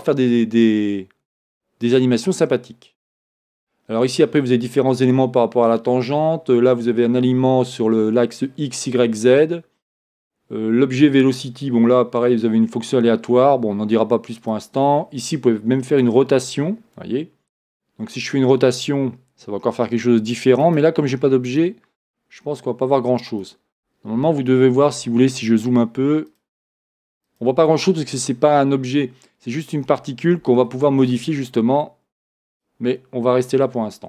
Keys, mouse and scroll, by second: 1.8-14.6 drag, 11.7-14.4 scroll down 2, 14.4 scroll down 1, 16.0 click, 20.7-23.8 drag, 24.3-25.5 scroll up 2, 25.5-26.3 scroll up 1, 26.3-27.6 drag, 28.2 scroll down 2, 32.5 shift+middle click, 32.5 click.